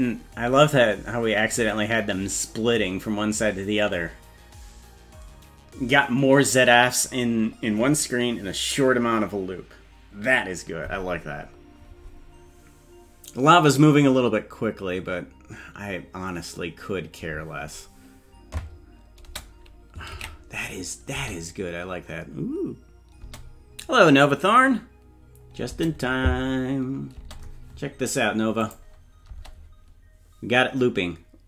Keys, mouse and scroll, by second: 19.2 space, 20.3 ctrl+s, 21.1 space, 23.2 space, 27.2 space, 28.6 click, 29.3 space.